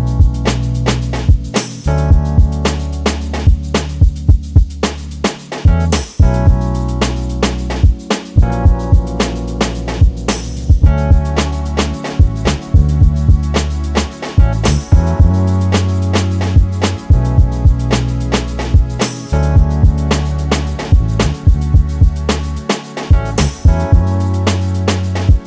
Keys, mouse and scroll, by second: 0.3-0.6 scroll up 1, 0.6 Tab, 1.4 e, 6.9-11.1 drag, 9.0 Delete, 10.8 scroll up 1, 11.1-12.4 middle drag, 12.4-23.5 drag, 13.5 shift+a, 20.6 KP_Enter, 23.9 click.